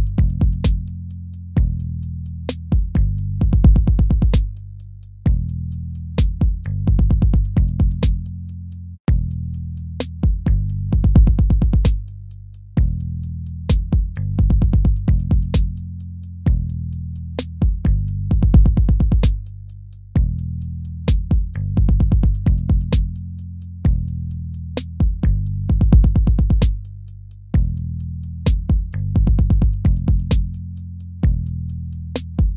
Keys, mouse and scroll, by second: 14.4 ctrl+-, 17.8 right click, 26.1 ctrl+-, 26.4 ctrl+-, 26.6 ctrl+-.